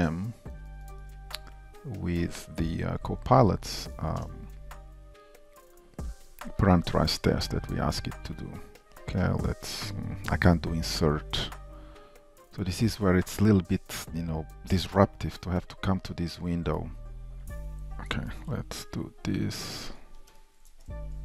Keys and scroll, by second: 5.6 shift+super+a, 21.0 super+c.